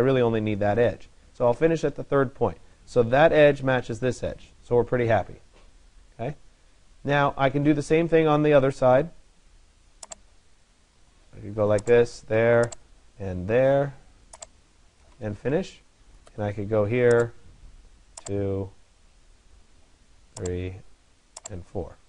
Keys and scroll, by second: 1.0 Return, 14.7 Return.